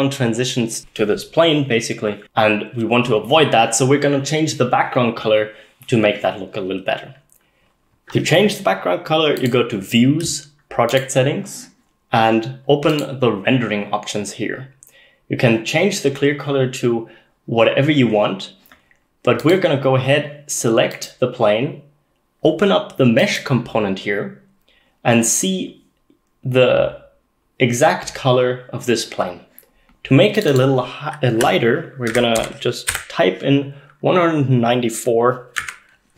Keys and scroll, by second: 32.1-33.0 typing, 35.6 Tab.